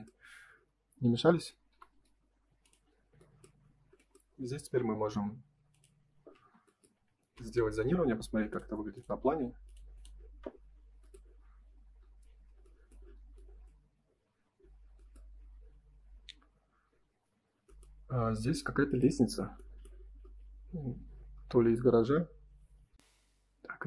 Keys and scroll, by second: 6.3 space, 7.1 ctrl+s.